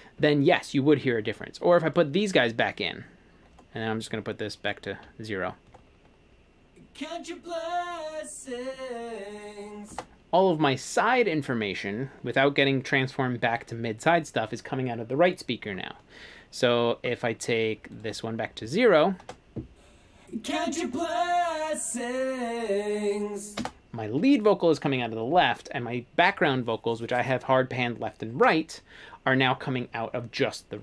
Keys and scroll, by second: 5.7 space, 10.0 space, 19.3 space, 23.6 space.